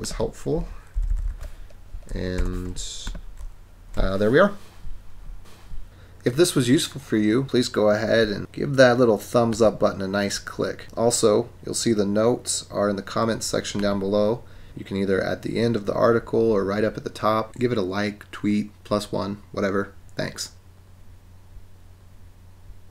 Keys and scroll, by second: 0.9 super+=, 1.4 super+=, 2.5 super+-.